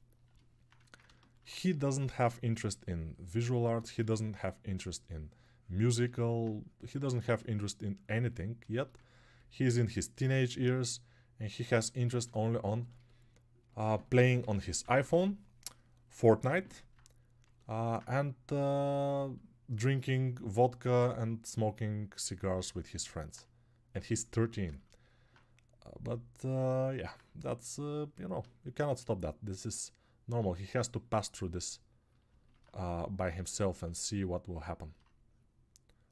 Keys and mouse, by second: 0.3 [.